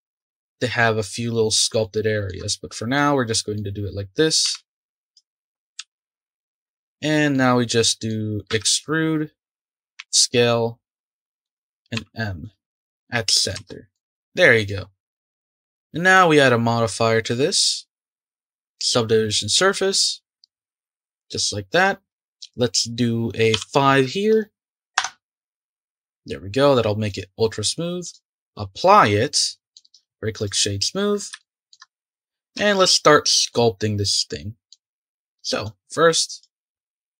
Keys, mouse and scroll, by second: 4.4 s, 5.8 e, 6.3 s, 7.3-8.5 middle drag, 8.5 e, 11.9 m, 13.5 Tab, 13.9-14.6 middle drag, 14.6 click, 21.7-24.9 drag, 27.1-28.9 drag, 28.9-29.3 scroll down 2, 29.3-29.9 middle drag, 29.9-30.7 right drag, 30.7-31.4 scroll up 3, 31.4-32.5 shift+middle drag, 32.5 Tab, 33.5-35.0 middle drag, 35.0-35.5 scroll up 3, 35.6-36.8 drag, 36.8 ctrl+z.